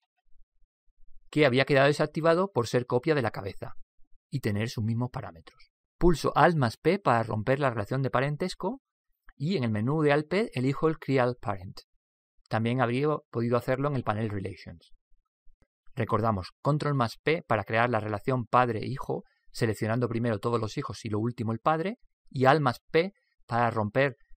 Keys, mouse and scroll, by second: 9.4 alt+p.